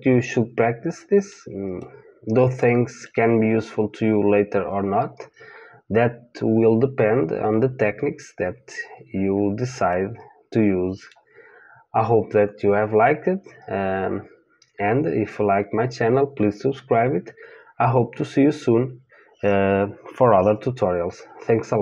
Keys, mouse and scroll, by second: 1.8-9.2 middle drag, 9.9-14.1 middle drag.